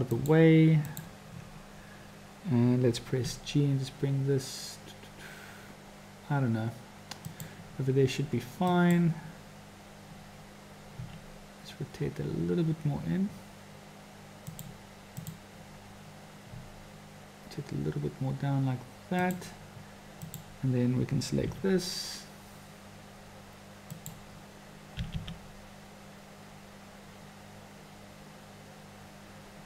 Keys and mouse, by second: 0.9 click, 3.3 g, 8.7 click, 10.9 r, 15.1 click, 16.5 r, 20.2 click, 21.5 g, 25.0 g.